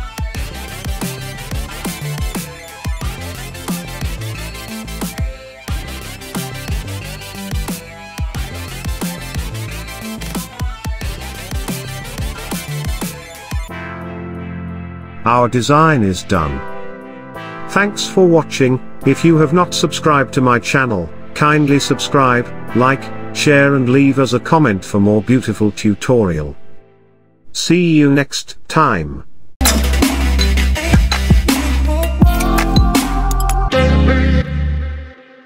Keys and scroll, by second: 0.0-1.3 typing, 2.3-3.2 typing.